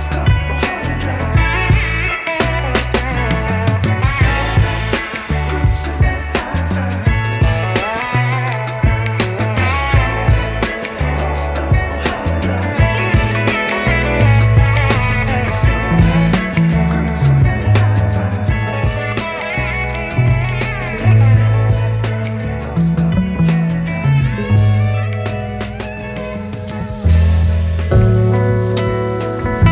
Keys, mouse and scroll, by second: 1.5-2.9 scroll up 11, 2.6 middle click, 2.9 s, 9.7 click, 10.6 click, 11.5-12.6 drag, 13.1-14.0 drag, 14.2-19.6 drag, 19.6-20.3 scroll down 5, 20.3-22.4 drag, 22.9 click, 23.2 click, 25.9-26.2 scroll down 2, 27.5 click, 29.6 click.